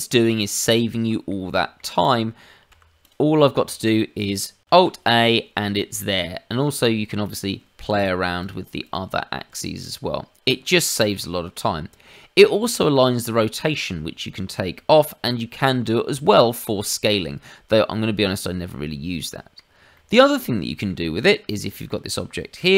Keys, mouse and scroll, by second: 0.1 click, 0.5 middle click, 1.5 shift+middle click, 2.0 click, 2.7 g, 3.8 shift+click, 4.8 alt+a, 4.8 shift+click, 5.9 middle click, 7.1 shift+middle click, 8.3 click, 8.8 click, 9.5 click, 9.8 click, 19.1 middle click, 20.1 shift+middle click, 20.3 click, 20.6 middle click, 21.2 click, 21.6 shift+middle click.